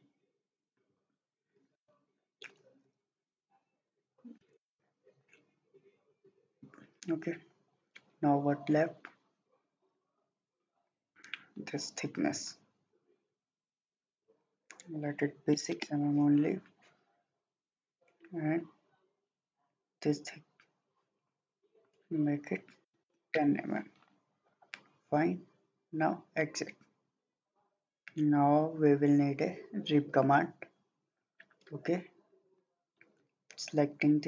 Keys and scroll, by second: 4.5 2, 4.7 Return, 15.5 6, 15.8 Return, 22.7-23.6 typing.